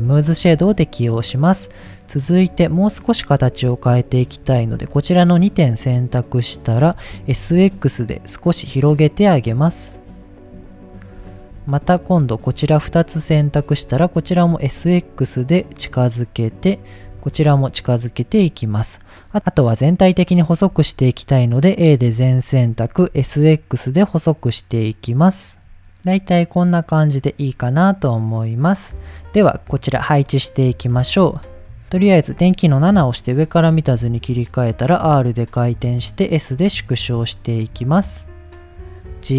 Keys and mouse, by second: 0.4 Tab, 2.1 click, 4.2 shift+click, 6.9 s, 7.3 x, 10.5 click, 11.3 shift+middle click, 12.1 click, 13.3 s, 13.5 x, 15.7 click, 16.4 click, 17.1 s, 17.3 x, 18.2 click, 19.0 middle click, 20.7 a, 22.1 s, 23.0 x, 25.3 click, 25.8 Tab, 26.0-26.5 middle drag, 26.8-27.2 middle drag, 27.5-28.5 middle drag, 29.0-29.3 middle drag, 30.3 middle drag, 30.9 click, 31.7 click, 32.9 KP_7, 33.9 r, 34.9 click, 35.0-37.7 typing, 35.7 click, 36.4 click, 37.0 click, 37.5 click, 38.1 drag, 38.6 middle click, 39.1 g, 39.2 z.